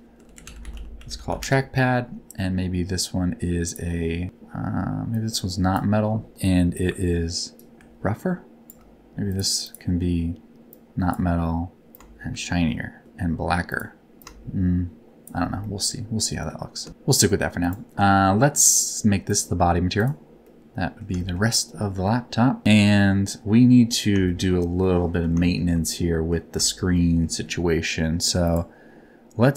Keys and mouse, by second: 3.6 click, 5.1 click, 6.8 ctrl+click, 7.6-8.7 ctrl+shift+drag, 9.3 click, 9.6 click, 10.7 click, 12.0-13.0 ctrl+shift+drag, 13.7 click, 15.7 middle click, 19.3 click, 20.5 middle click, 21.1 shift+middle click, 22.0 middle click, 24.2 shift+middle click, 24.8 middle click, 25.4 shift+middle click, 25.9 middle click, 26.9 middle click, 28.5 click.